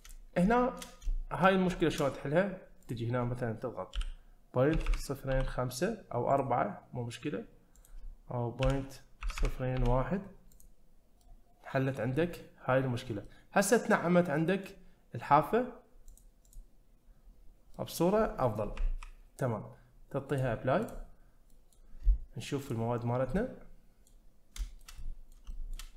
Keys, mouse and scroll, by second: 0.5 shift+middle drag, 1.1 shift+middle drag, 1.7 shift+middle click, 2.8-6.5 drag, 4.9 0, 7.8-10.7 drag, 9.4 0, 11.2-11.9 middle drag, 12.1-12.8 scroll up 1, 13.3-14.6 middle drag, 16.1 click, 17.4-17.8 scroll down 1, 17.8 middle click, 17.9-18.8 scroll down 2, 20.3-21.1 drag, 21.5 middle click, 22.6 click, 23.1 scroll down 1, 23.4-24.1 middle drag, 24.6 shift+middle drag, 25.0-25.3 middle drag, 25.5 shift+middle click.